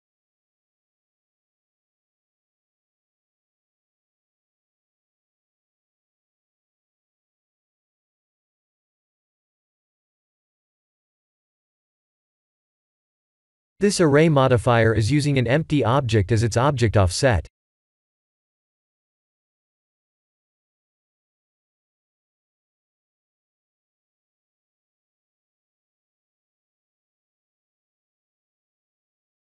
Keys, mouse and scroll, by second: 3.2 click, 4.7 middle click, 8.9 scroll down 5, 10.8 click, 11.3-11.8 scroll down 6, 12.3-13.8 scroll down 2, 14.2 click, 15.3-17.2 scroll down 20, 17.7 middle click, 22.4 middle click, 22.9-25.5 scroll up 22, 28.0-29.4 scroll down 10.